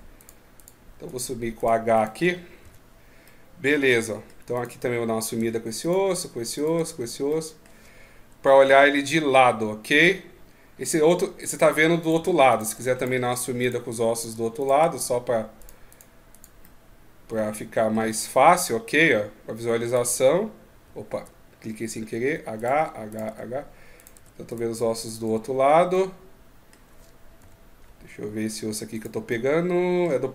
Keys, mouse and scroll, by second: 2.4 h, 3.0 middle click, 4.3 right click, 5.2 h, 5.6 right click, 5.9 h, 6.3 right click, 6.5 h, 7.0 middle click, 8.4 KP_3, 11.8 right click, 11.9-14.6 typing, 12.3 right click, 12.7 right click, 13.4 right click, 13.9 right click, 14.3 right click, 15.4 right click, 15.7 right click, 16.4 middle click, 18.3 KP_3, 19.7 right click, 19.9 g, 22.3 right click, 22.5-25.0 typing, 22.8 right click, 23.7 right click, 24.2 right click, 24.8 right click, 25.7 middle click, 27.2 KP_3, 28.7 right click, 29.1 middle click.